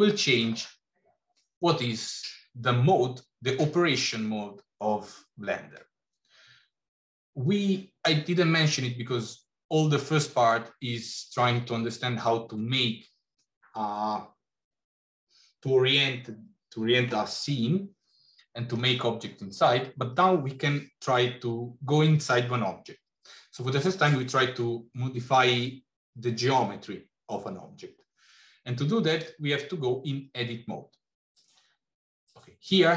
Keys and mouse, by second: 29.1-32.8 drag.